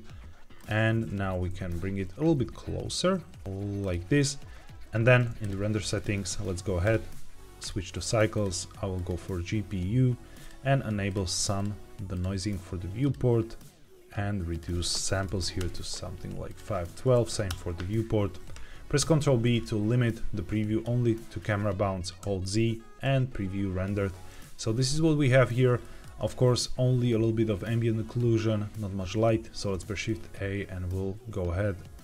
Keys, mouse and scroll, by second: 0.5 click, 1.1 g, 1.2 z, 3.7-5.3 drag, 5.8 click, 6.7-7.6 drag, 8.2-9.0 drag, 10.3 click, 11.5-12.1 drag, 12.9 click, 14.4-15.5 drag, 16.4-17.4 drag, 18.9 ctrl+b, 25.0 scroll down 1, 25.7 shift+middle click, 29.4 shift+a.